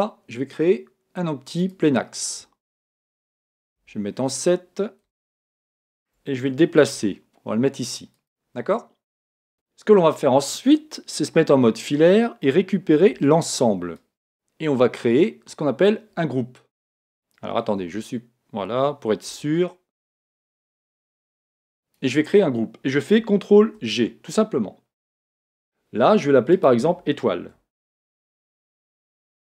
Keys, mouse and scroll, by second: 3.7 KP_7, 5.2-7.1 middle drag, 6.9 g, 8.2 click, 11.3 z, 13.1 b, 17.8 a, 19.4 b, 23.6 ctrl+g, 26.5 click.